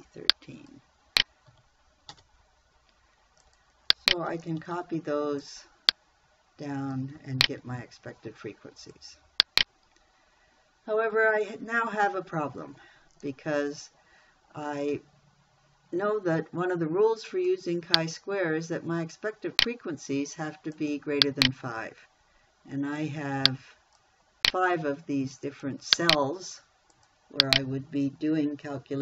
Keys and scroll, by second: 1.9 F4, 2.5 Return, 5.0 ctrl+c, 7.9 ctrl+v.